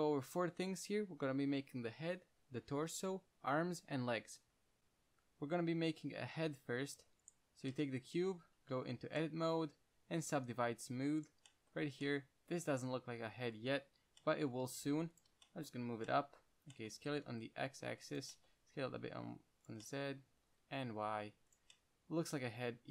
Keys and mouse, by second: 7.8 click, 9.1 Tab, 10.1 w, 15.0 g, 15.5-17.4 middle drag, 18.2 s, 18.9 s, 20.7 s, 22.6-22.9 middle drag.